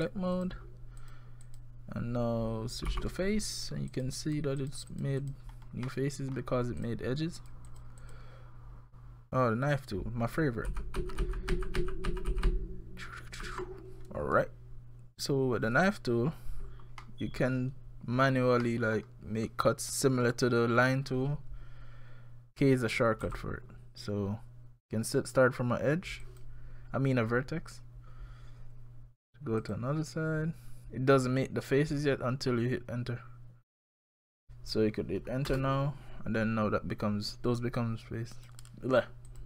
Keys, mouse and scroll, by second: 0.4 click, 1.0 click, 1.5 click, 2.9 3, 3.6 click, 3.9 click, 4.2 click, 4.6 click, 4.9 click, 5.2 click, 5.9 middle click, 6.8 click, 7.4 click, 7.7 click, 8.0 click, 9.3 click, 10.7 ctrl+z, 11.0 ctrl+z, 11.2 ctrl+z, 11.5 ctrl+z, 11.8 ctrl+z, 12.1 ctrl+z, 12.3 ctrl+z, 12.5 ctrl+z, 13.0-13.4 ctrl+z, 17.0 middle click, 18.3 scroll down 1, 18.6 middle click, 23.2 k, 38.4 click, 39.3 click.